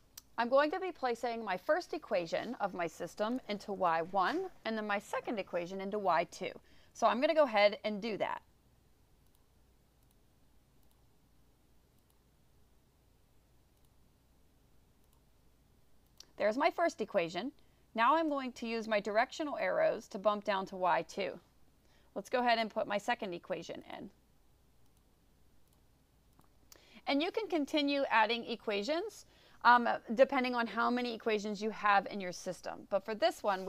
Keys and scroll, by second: 10.1 1, 10.9 ÷, 12.1 3, 15.1 -, 16.2 1, 19.6 Down, 24.0 2, 26.4 4.